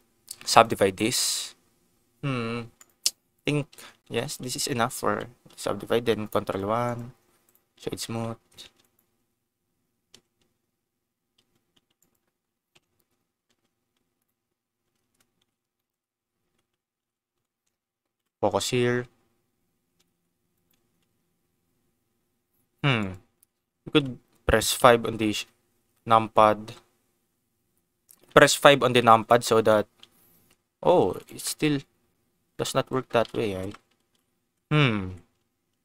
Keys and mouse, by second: 2.7 click, 4.0 ctrl+z, 4.2 Tab, 4.6 Tab, 4.9 1, 5.4 Tab, 6.4 ctrl+1, 6.8 click, 8.0 Tab, 8.9 click, 9.2 t, 10.0 t, 11.3 g, 11.9 click, 12.8 o, 13.4 g, 14.1 click, 15.4 ctrl+z, 15.7 shift+click, 16.4 Tab, 17.0 ctrl+s, 18.2 KP_0, 20.0 Tab, 20.5 click, 21.0 g, 23.0 click, 23.2 Tab, 23.8 ctrl+s, 24.7 KP_5, 26.7 KP_Divide, 28.2 KP_5, 28.8 Tab, 29.5 g, 31.2 click, 31.4-32.9 middle drag, 33.1 ctrl+z, 33.9 KP_0, 34.4 Tab, 35.6 Tab, 35.6 g.